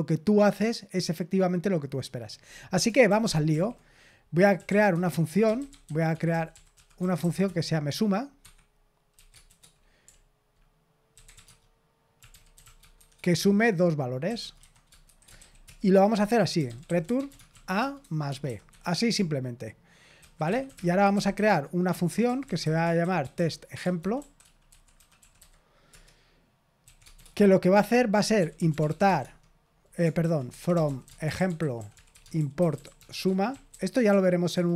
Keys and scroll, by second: 3.0 super+l, 3.4 super+l, 4.2-7.6 typing, 8.3 Escape, 9.1-18.4 typing, 18.6 Escape, 19.9-34.7 typing, 30.1 ctrl+w.